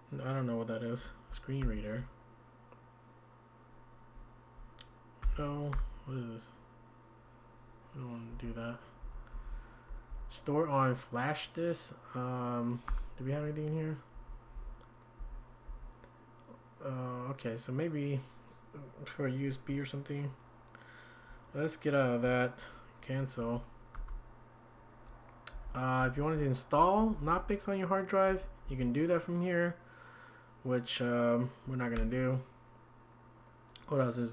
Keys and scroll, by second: 1.6 ctrl+x, 5.2 n, 5.7 Return, 8.3 Up, 9.0 Down, 9.5 Down, 10.1 Down, 12.9 Return, 15.2 Down, 15.7 Up, 23.4 Tab, 25.5 Up, 26.0 Down, 26.4 Down, 27.0 Down, 27.1 Down, 27.3 Down, 28.3 Up, 28.6 Down, 32.0 Escape.